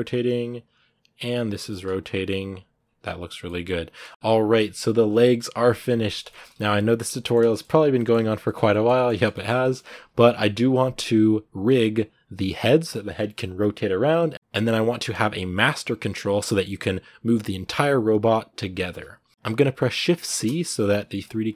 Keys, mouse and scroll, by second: 0.2 scroll down 2, 0.2 right click, 0.4 r, 1.4 shift+middle click, 1.7 r, 2.4 right click, 2.6 scroll down 2, 2.8 r, 3.2-6.3 middle drag, 6.3 a, 7.0-8.4 shift+middle drag, 8.4-9.1 scroll up 2, 8.5 shift+middle click, 9.1-10.9 shift+middle drag, 10.9 scroll up 2, 14.1 scroll down 1, 14.3-20.1 shift+middle drag, 20.1 shift+c.